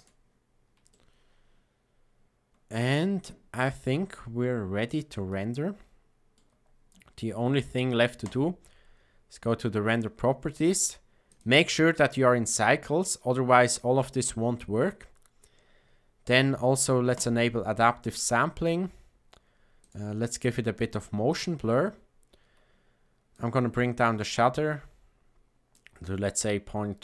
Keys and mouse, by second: 0.8-2.8 shift+middle drag, 5.2-6.3 shift+middle drag, 8.1 click, 11.2-12.8 drag, 19.7 click, 21.2 click, 23.3-25.7 drag.